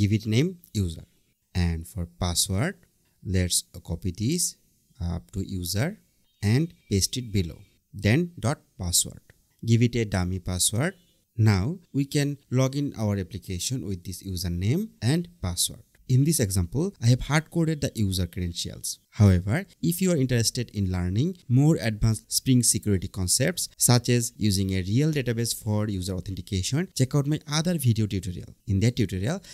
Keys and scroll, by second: 1.4 Return, 2.8 BackSpace, 4.0 super+c, 5.8 Return, 6.1 super+v, 8.0 Return.